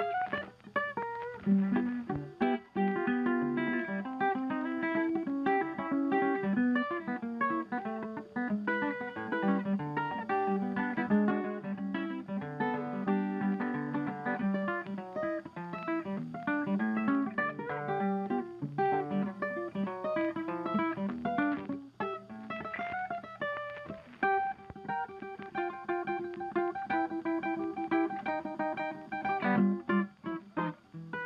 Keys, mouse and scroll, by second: 0.0 shift+click, 0.1 s, 0.4 ctrl+scroll down 2, 3.5-3.8 ctrl+scroll down 4, 4.2 space, 5.1 space, 5.7 ctrl+scroll down 1, 7.5 ctrl+scroll down 1, 7.8 ctrl+click, 8.6 ctrl+click, 9.0 ctrl+scroll down 2, 11.6 double click, 12.9 typing, 14.3-16.0 typing, 26.0 ctrl+s, 30.2-30.7 double click, 30.5 double click.